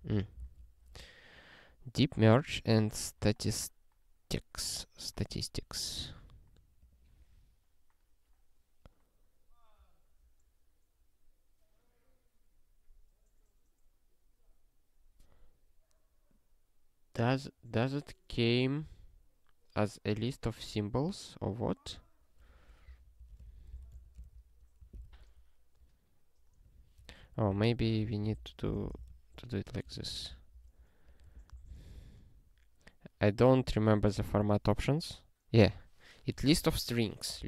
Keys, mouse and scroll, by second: 0.0 ctrl+n, 0.5 ctrl+e, 6.8 click, 22.8 ctrl+f, 23.2 ctrl+f, 23.2-24.4 typing, 25.1 ctrl+s, 26.7 click, 27.0 BackSpace, 27.2 s, 27.5 ctrl+f, 27.8 ctrl+f, 28.3 ctrl+alt+k, 28.4-29.4 typing, 30.0 ctrl+g, 31.0 click, 31.5 ctrl+n, 31.9 ctrl+e, 33.5 click, 34.2 ctrl+e.